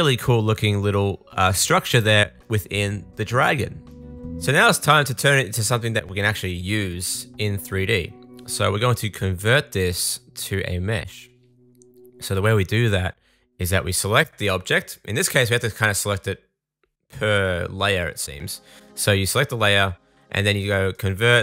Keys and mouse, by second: 1.1-3.5 middle drag, 3.5-9.8 drag, 9.8 middle click, 9.9-15.9 drag, 15.9 middle click.